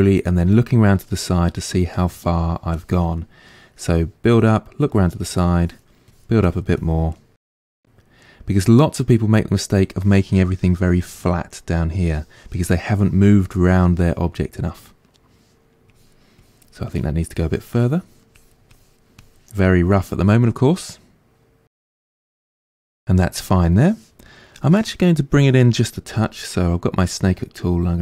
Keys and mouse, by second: 1.9 click, 2.3 middle click, 2.7 click, 3.2-5.6 middle drag, 5.6-7.2 drag, 7.2-15.9 middle drag, 15.9-19.6 drag, 19.6-24.6 middle drag, 24.6-26.1 drag, 26.1-27.7 middle drag, 26.1 f, 27.7-28.0 drag.